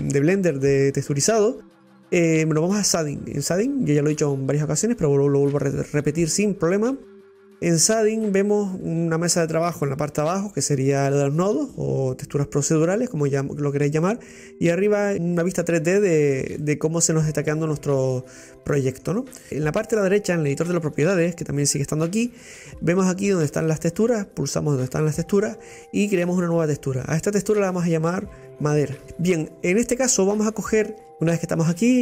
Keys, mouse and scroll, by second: 3.0 click, 6.4 scroll up 2, 6.6 scroll down 2, 16.7-19.4 middle drag, 26.5 click, 27.6-29.0 drag, 31.1-32.0 drag.